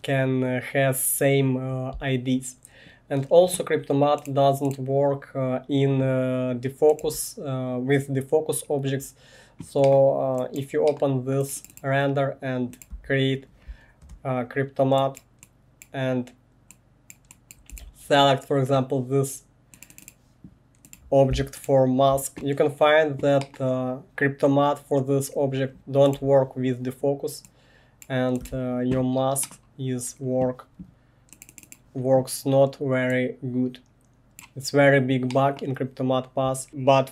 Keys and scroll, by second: 7.0 1, 12.9 Tab, 14.0 Return, 17.7 1, 26.1 1, 28.4 1.